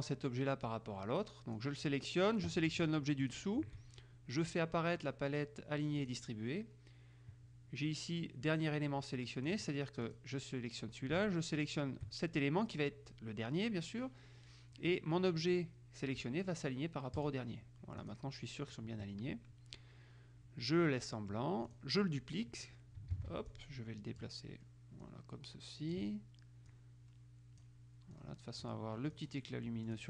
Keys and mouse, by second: 0.8-2.2 drag, 3.4 shift+click, 6.1 click, 9.7-10.8 drag, 11.7 shift+click, 17.3 click, 18.2 click, 21.1-22.4 drag, 23.3 ctrl+d, 23.7-24.9 ctrl+drag, 25.2-26.6 drag, 26.9-30.0 drag.